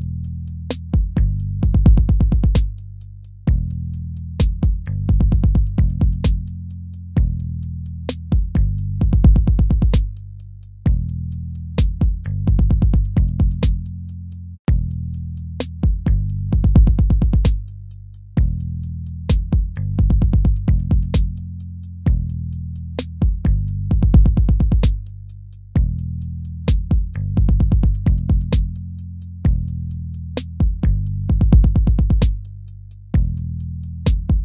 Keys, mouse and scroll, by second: 8.2 ctrl+z, 9.1 ctrl+-, 9.9 ctrl++, 17.9 ctrl+-, 18.4 ctrl++, 19.7 ctrl+-, 27.0 right click, 28.2 right click, 28.7 BackSpace, 28.9 ctrl++, 29.2 ctrl++, 30.5 ctrl++, 30.7 ctrl++, 31.4 ctrl+-, 31.6 ctrl+-, 32.2 ctrl+z, 32.7 ctrl+-.